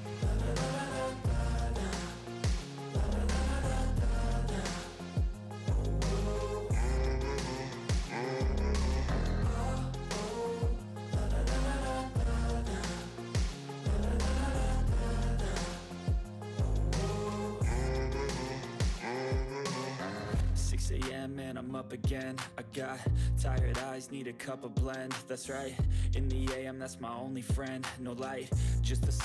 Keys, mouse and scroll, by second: 1.5 click, 1.6-3.3 typing, 4.7-6.3 typing, 6.3 click, 12.0 typing, 13.8-16.7 typing, 17.9 ], 21.4-22.9 typing, 23.3 click, 27.4 click, 27.4-28.0 typing.